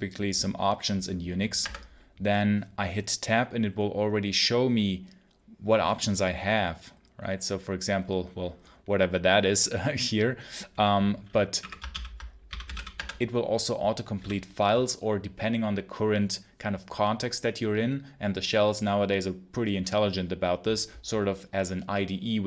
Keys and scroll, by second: 1.5 Tab, 11.4-14.0 typing, 11.8 ctrl+l.